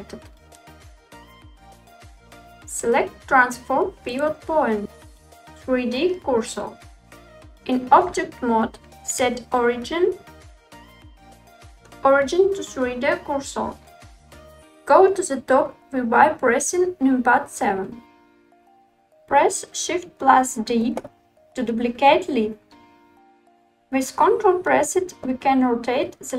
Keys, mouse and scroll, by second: 4.2-7.2 drag, 7.8 Tab, 9.2-10.3 drag, 9.2 right click, 10.4-14.6 drag, 10.4 right click, 17.3 KP_7, 20.7 shift+d, 25.1 r.